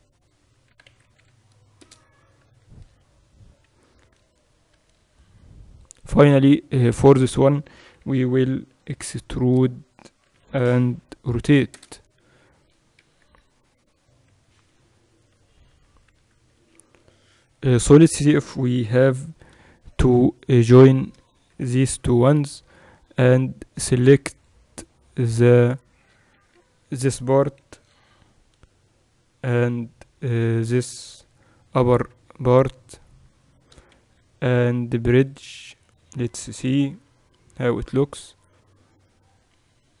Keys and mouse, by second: 0.8 e, 2.5 a, 4.8 b, 8.2 e, 10.4 e, 13.0 KP_2, 13.3 KP_2, 13.6 KP_2, 15.7 Tab, 16.2 z, 16.6 click, 17.5-19.3 right drag, 21.0-22.8 right drag, 22.0 ctrl+j, 22.8 Tab, 24.5-26.0 drag, 25.3 right click, 26.0-27.6 middle drag, 26.5 KP_2, 26.7 KP_2, 30.0 middle click, 31.2 KP_2, 31.3 middle click, 31.6 KP_2, 33.5-35.3 right drag, 34.1 w, 37.0 KP_1, 38.3 KP_8, 39.4-40.0 typing.